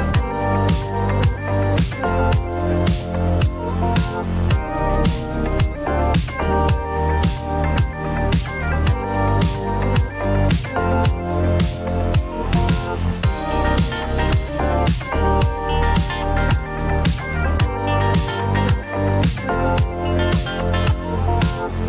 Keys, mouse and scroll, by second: 0.2 click, 0.2-1.0 typing, 2.0 click, 2.4 1, 4.2 click, 5.8 click, 6.9-7.8 typing, 8.9 click, 9.1-11.6 typing, 11.7 click, 14.0 drag, 15.6-17.2 drag, 18.5 right click, 19.2 click, 19.6-21.0 typing, 21.6 click.